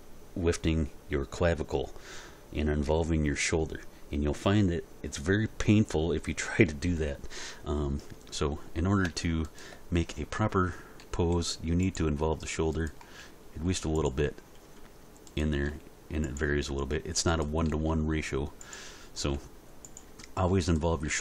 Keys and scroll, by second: 11.0 r, 13.2 r, 15.7 r, 17.7 r, 19.3 r, 21.1 r.